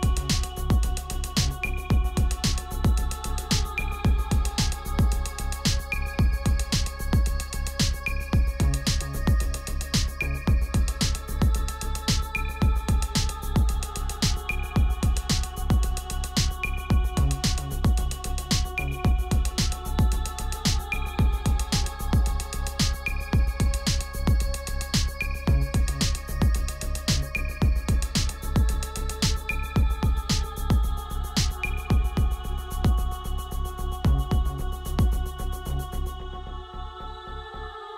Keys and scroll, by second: 7.8 ctrl+z, 12.3 ctrl+z, 20.7 ctrl+t, 28.9 b, 31.9 ], 32.2 ], 34.8 space, 35.4 space.